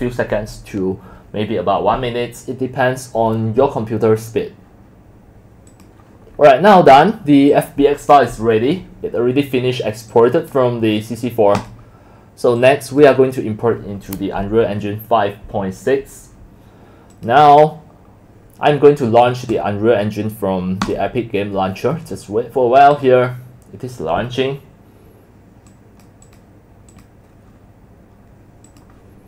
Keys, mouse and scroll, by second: 0.2-1.1 drag, 4.7 click, 8.9 click, 9.3 click, 9.7 click, 11.9 click, 12.6-13.0 drag, 17.1 click, 20.8 click, 21.7 drag, 22.9 click, 23.3 click, 25.7 drag, 26.2 click, 26.9 click, 28.7 click.